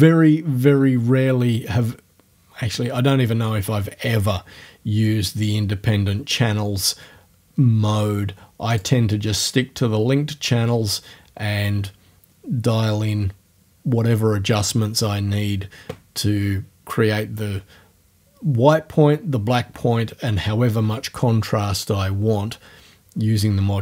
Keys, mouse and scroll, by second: 8.7 click.